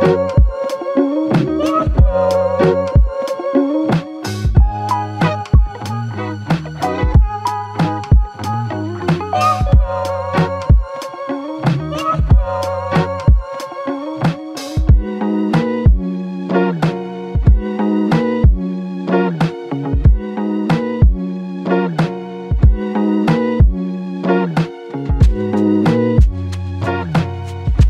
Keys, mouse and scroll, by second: 0.1 alt+click, 2.9-3.6 alt+scroll up 2, 3.6-4.1 scroll down 1, 4.2 alt+click, 10.3 Tab, 11.2 scroll up 1, 11.9-12.6 scroll down 1, 12.7 Tab, 13.3 Tab, 13.5 alt+click, 15.0 alt+l.